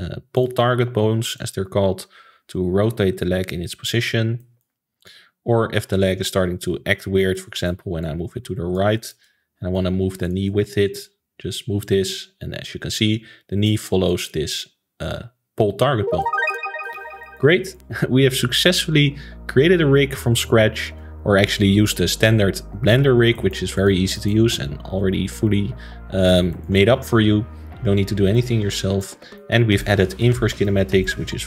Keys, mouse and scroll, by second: 0.3 click, 0.6-1.3 scroll up 1, 1.3 click, 4.4 middle click, 5.0 click, 6.0 click, 7.3 middle click, 8.0 click, 8.9-10.2 shift+middle drag, 10.2 click, 10.4-11.0 middle drag, 11.0 click, 14.1-15.9 middle drag, 17.2-19.7 shift+middle drag, 19.7 alt+a, 21.0 a, 22.2 alt+r, 22.9 alt+g, 23.3-23.7 shift+middle drag, 23.7 click, 24.1-24.5 shift+middle drag, 24.5-24.9 scroll up 2, 24.9 ctrl+s, 25.3-31.4 middle drag.